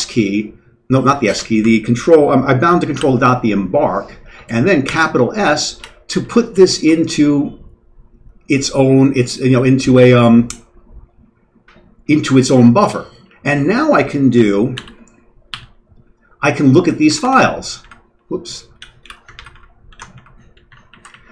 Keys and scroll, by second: 2.9 ctrl+., 4.9 s, 6.2 Down, 6.3 Down, 6.5 Down, 13.2 Up, 13.4 Up, 14.7 ctrl+., 15.5 f, 17.1 ctrl+m, 17.2 ctrl+m, 17.7 ctrl+m, 18.7 ctrl+g, 19.0 ctrl+x, 19.3 ctrl+m, 19.5 ctrl+m, 19.9 ctrl+g, 20.1 m, 20.6 Right, 20.8 Down, 21.0 Down.